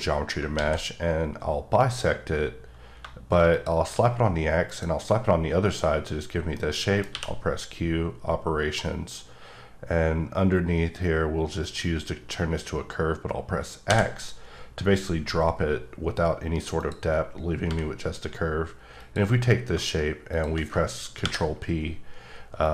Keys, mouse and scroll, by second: 0.5 alt+x, 3.5 x, 3.5 shift+click, 6.6 middle click, 7.1 q, 11.6 click, 13.8 x, 16.7 click, 17.6 h, 19.0 click, 20.3 shift+click, 21.2 ctrl+p, 22.6 click.